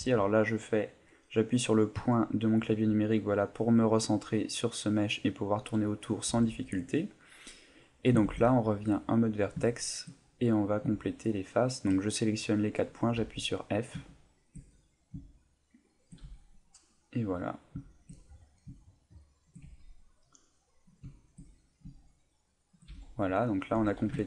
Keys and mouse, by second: 1.9 KP_Decimal, 3.2 middle click, 5.3 middle click, 5.8 middle click, 6.3 Tab, 6.8 middle click, 8.2 ctrl+Tab, 9.3 right click, 9.7 shift+right click, 10.2 middle click, 11.2 shift+right click, 11.7 shift+right click, 12.1 middle click, 13.2 f, 14.8 middle click, 15.5 shift+right click, 16.0 shift+right click, 16.2 f, 16.4 middle click, 17.5 right click, 17.9 right click, 18.1 middle click, 19.0 shift+right click, 19.6 f, 19.8 middle click, 20.6 right click, 21.1 shift+right click, 21.5 middle click, 22.3 shift+right click, 22.9 f, 23.1 middle click, 23.7 Tab, 24.2 ctrl+middle click.